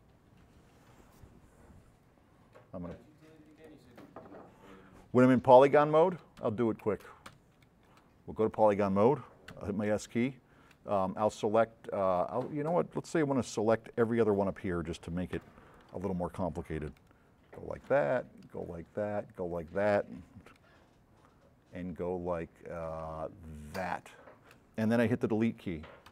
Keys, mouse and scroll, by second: 3.3-4.1 drag, 5.8 s, 6.0 right click, 6.5 d, 7.0 space, 7.4 d, 7.6 right click, 8.5 drag, 9.5 s, 9.9 right click, 14.2 click, 15.4 F9, 15.8 click, 16.9 s, 17.0 right click, 19.3 shift+click, 20.6-22.9 right drag, 20.6 s, 23.6 shift+click.